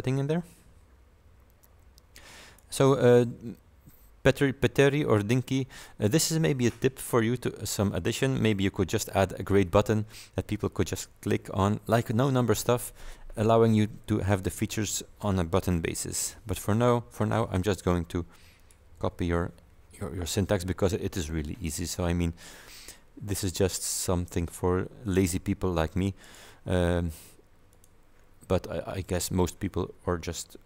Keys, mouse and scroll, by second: 1.7 click, 16.2 ctrl+v, 18.7 click, 19.0 BackSpace, 23.8 click, 26.3 right click, 27.8 click, 29.1 click.